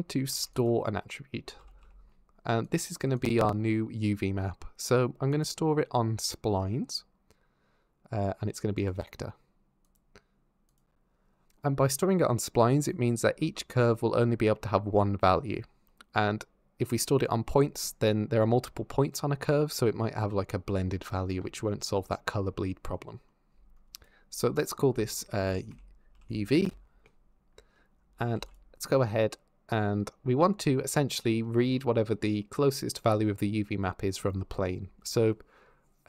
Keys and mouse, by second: 0.1 shift+a, 5.1-9.2 drag, 9.7-11.1 drag, 23.8-26.8 drag, 28.1 shift+a, 31.6 middle click.